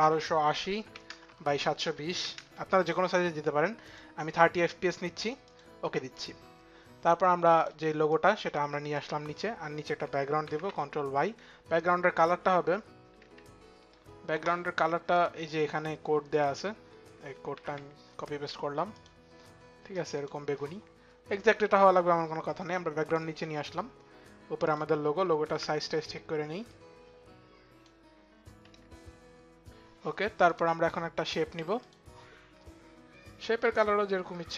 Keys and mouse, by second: 0.3-2.4 typing, 1.3 Tab, 2.4 Tab, 4.2 click, 4.2 KP_0, 4.3 Tab, 4.3 KP_2, 4.3 KP_7, 5.4 click, 5.4 KP_0, 5.4 KP_2, 5.4 KP_7, 6.6 click, 7.6 click, 8.1 click, 9.7 click, 9.7 click, 10.5 click, 10.5 y, 11.8 click, 11.8 y, 12.3 y, 12.9 click, 13.5 click, 14.9 click, 16.1 click, 16.9 ctrl+click, 18.7 click, 19.9 click, 22.5 click, 22.9 click, 24.4 click, 25.2 click, 25.2 s, 25.6 click, 25.6 s, 26.4 click, 30.1 click, 31.5 click, 34.1 click.